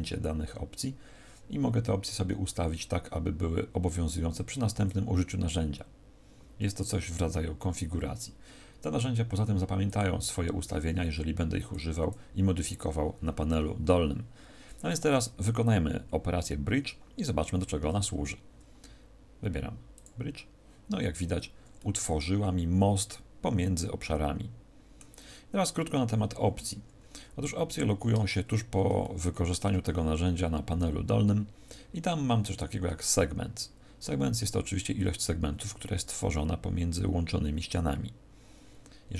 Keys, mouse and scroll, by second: 0.2-1.4 scroll down 3, 9.8 click, 11.6 click, 21.7 middle click, 28.4-29.0 scroll up 1, 29.0 shift+middle click, 29.0-30.1 scroll up 2.